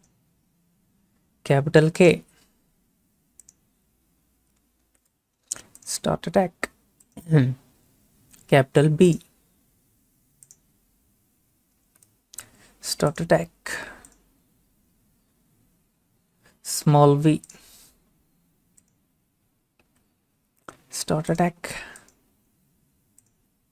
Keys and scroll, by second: 4.9 k, 11.9 b, 19.9 v.